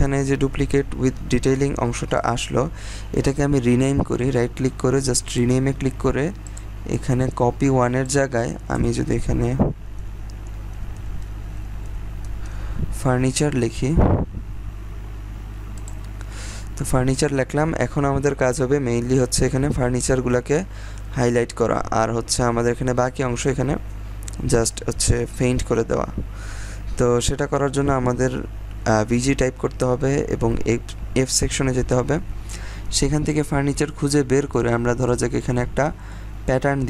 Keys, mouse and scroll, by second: 2.1 right click, 5.2-9.4 drag, 9.4-12.9 typing, 15.7 click, 22.4-22.8 scroll down 1, 22.8-23.4 scroll up 1, 23.4-24.0 scroll down 1, 24.0 scroll up 1, 27.2-28.0 scroll down 1, 28.0 typing, 31.4 f, 32.2-34.4 scroll down 1, 34.5 click.